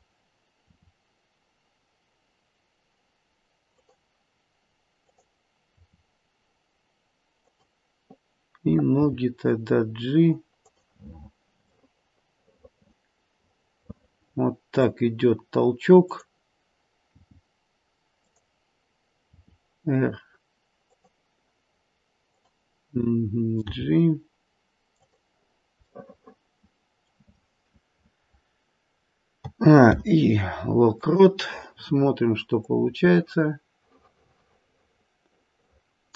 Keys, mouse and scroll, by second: 0.7 r, 4.9 click, 5.7 r, 8.9 g, 11.7 middle click, 12.4 middle click, 12.6 middle click, 13.6 middle click, 16.0 click, 17.1 g, 19.4 r, 22.2 click, 23.7 g, 25.9 middle click, 27.4-28.8 scroll down 2, 29.4 a, 29.8 i, 32.7 click.